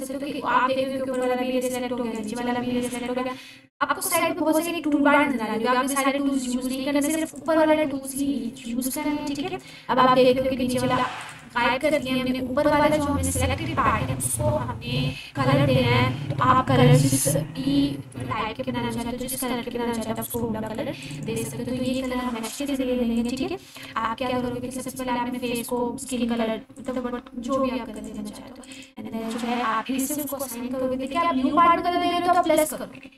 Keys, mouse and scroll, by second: 1.2-2.4 drag, 3.0-3.9 ctrl+drag, 7.3 click, 8.4 ctrl+drag, 20.2-33.1 drag, 23.5-25.7 drag.